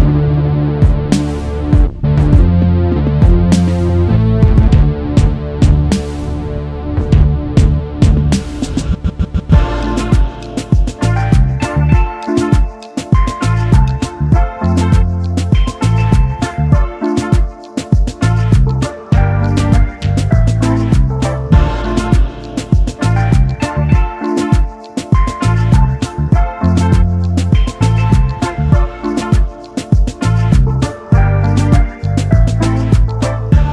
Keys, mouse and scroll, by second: 0.0 scroll up 1, 0.3 scroll down 1, 1.0 scroll down 1, 1.1 scroll up 1, 1.3-2.2 scroll down 1, 2.2-3.5 scroll up 1, 3.5-4.4 scroll down 1, 7.5 Return, 8.4 space, 8.8 alt+scroll up 1, 9.6 space, 11.5 alt+shift+click, 14.4 alt+scroll down 1, 15.6 space, 15.7 double click, 16.0 space, 17.6 alt+scroll down 1, 18.1 space, 19.7 typing, 20.8 typing, 21.7-22.0 alt+scroll up 2, 22.1 space, 22.2 double click, 22.5 space, 24.1 space, 26.4 double click, 26.7 space, 29.4-31.5 scroll down 1, 33.1 Return.